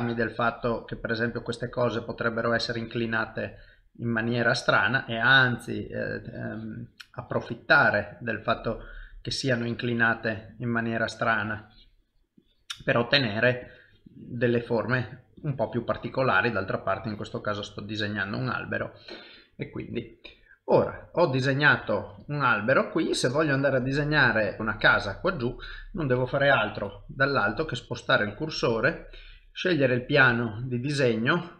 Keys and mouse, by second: 0.3 click, 1.7 middle click, 2.6 click, 3.7 middle click, 4.4 click, 6.3 click, 7.2 click, 7.9 middle click, 9.3 click, 10.6 middle click, 11.5 click, 12.4 click, 12.9 middle click, 13.6 click, 14.7 middle click, 15.4 click, 16.0 middle click, 17.0 click, 17.9 middle click, 19.2 middle click, 20.4 shift+middle click, 20.8 middle click, 21.2 middle click, 21.8 shift+middle click, 22.3 ctrl+middle click, 22.8 middle click, 24.4 shift+middle click, 24.6 shift+middle click, 24.9 middle click, 26.8 KP_7, 27.8 shift+right click, 29.4 shift+middle click, 30.2 click.